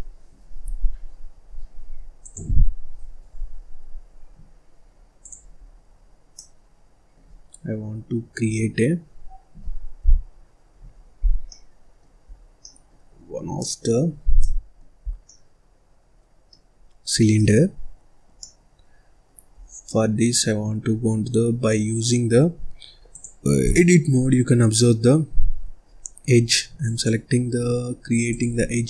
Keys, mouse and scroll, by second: 2.1-5.2 drag, 5.6 scroll down 2, 5.9-6.3 scroll up 1, 6.3-9.4 middle drag, 10.0 n, 10.9 scroll up 3, 11.2 scroll down 1, 11.4 middle click, 12.2-12.5 scroll down 3, 12.5 middle click, 13.1-13.5 scroll up 1, 13.5 middle click, 14.0 scroll up 1, 14.3 middle click, 15.0 scroll down 1, 15.2-16.7 middle drag, 16.7-17.1 scroll up 2, 17.1 scroll down 2, 17.3 middle click, 17.7-18.3 scroll up 1, 18.3-19.5 middle drag, 19.5-19.8 scroll down 3, 19.8-21.6 middle drag, 21.6 scroll up 2, 23.0-24.4 drag, 24.4-24.7 scroll up 1, 24.7-26.8 middle drag, 26.8 click, 28.2 click.